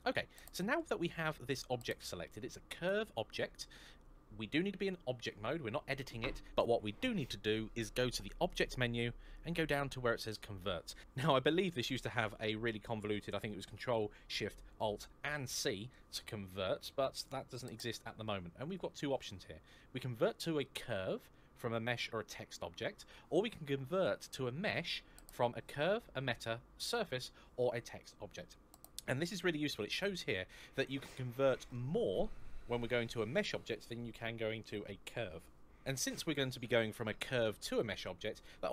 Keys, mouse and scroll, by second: 8.2 click.